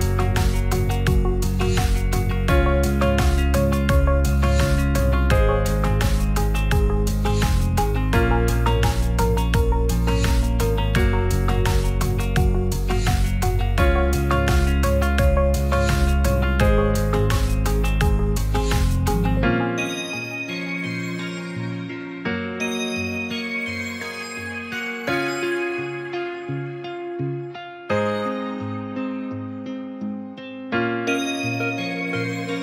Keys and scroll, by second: 18.5 b.